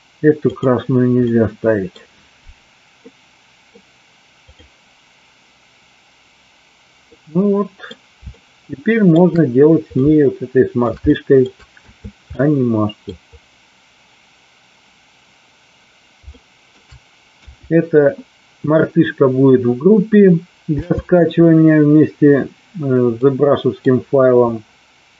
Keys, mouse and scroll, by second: 0.3 click, 1.2 middle click, 3.1-3.6 middle drag, 4.5 click, 7.1 middle click, 8.3 shift+middle click, 10.0-10.8 shift+middle drag, 11.1 shift+middle drag, 11.7 a, 12.3 middle click, 16.3 shift+middle click, 17.3 KP_1, 20.6 n, 23.1-23.7 middle drag.